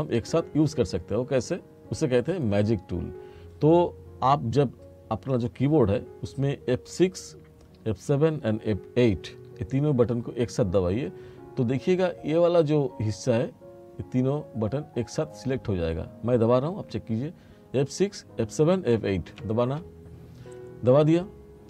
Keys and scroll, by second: 19.5 F6.